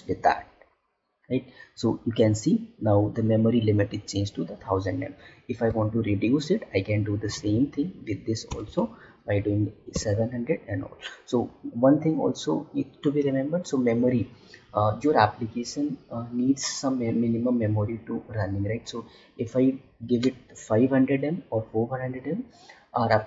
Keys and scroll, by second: 7.2 Left.